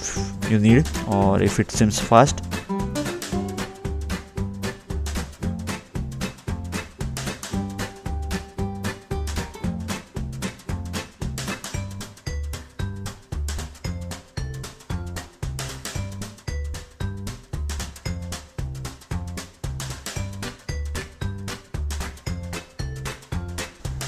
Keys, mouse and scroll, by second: 0.3 click, 1.4-1.8 scroll down 2, 2.5 middle click, 3.7 middle click, 8.1 middle click, 9.9 ctrl+8, 10.4 scroll down 2, 11.2 scroll down 1, 16.3 click, 18.3 scroll up 2, 18.9 scroll down 2, 20.0 middle click, 22.4 scroll up 1, 22.5 middle click, 23.2 scroll up 2, 23.3-23.7 scroll down 2.